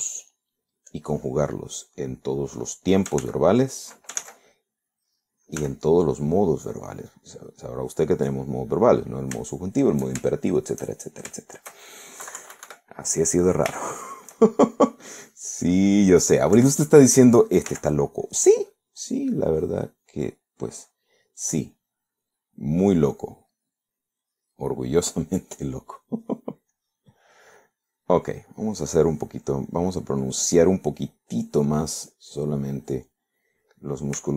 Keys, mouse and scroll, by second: 1.3 click, 2.0 click, 2.9 click, 4.3 ctrl+z, 5.3 ctrl+z, 6.7 f, 7.3 click, 7.8-8.8 drag, 10.7 shift+middle click, 11.4 shift+middle click, 12.1 shift+middle click, 13.3 KP_Subtract, 14.0 middle click, 14.9 shift+middle click, 17.6 3, 18.8 f, 19.3 click, 19.9 click, 20.5 click, 21.2 click, 21.8 right click, 25.0 right click, 26.8 middle click, 27.8 click, 28.3 click, 29.6 click, 30.1 click, 31.5 click, 32.1 click, 32.4 click, 33.1 click, 33.8 click.